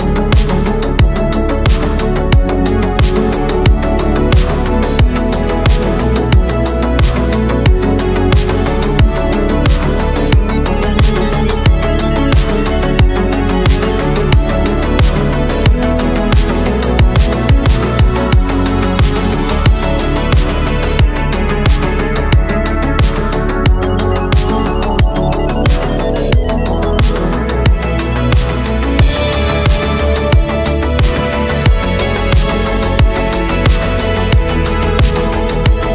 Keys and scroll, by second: 0.5 ctrl+z, 2.2 ctrl+z, 3.5 ctrl+z, 4.5 ctrl+z, 5.1 ctrl+z, 6.2 ctrl+z, 6.5 ctrl+z, 6.9 ctrl+z, 9.8 space, 10.9 ctrl+z, 12.8 ctrl+z, 14.4 ctrl+z, 14.7 space, 20.8 ctrl+z, 22.7 ctrl+z, 23.4 ctrl+z, 24.6 ctrl+z, 26.5 space, 31.1 space, 32.4 ctrl+z, 33.2 ctrl+z, 34.0 ctrl+z, 34.3 ctrl+z, 34.7 ctrl+z, 35.6 ctrl+z.